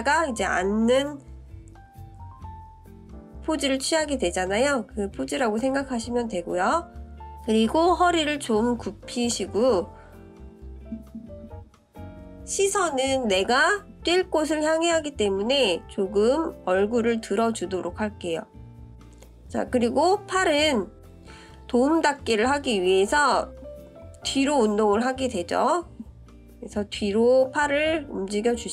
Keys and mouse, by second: 4.7-7.4 drag, 8.0 click, 9.6-13.7 drag, 14.7 click, 19.3 click, 20.6-24.2 drag.